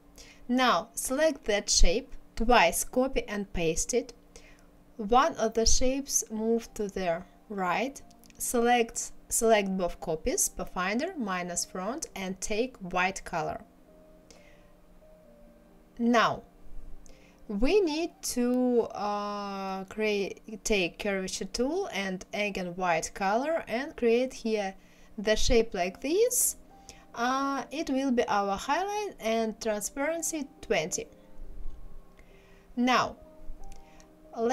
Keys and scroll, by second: 2.4 ctrl+c, 2.9 ctrl+f, 3.3 ctrl+c, 3.6 ctrl+f, 14.8 KP_1, 15.1 KP_0, 28.8 KP_2, 29.1 KP_0, 29.5 Return.